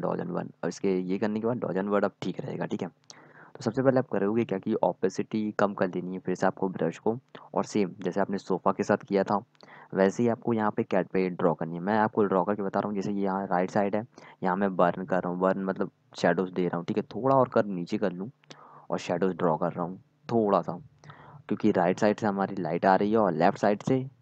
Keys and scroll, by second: 0.0-1.5 typing.